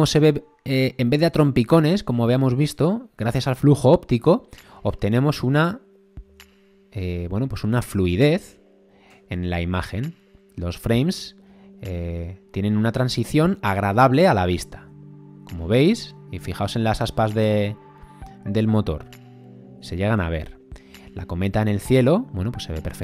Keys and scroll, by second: 1.7 space, 6.3 space, 7.8 space, 13.1 space, 14.8 space, 19.7 space, 20.9 space.